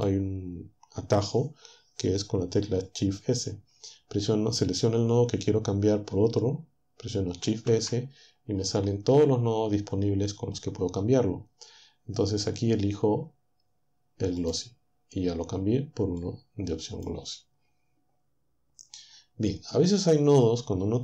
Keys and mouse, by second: 7.4 shift+s, 14.4 click, 16.2-20.1 drag.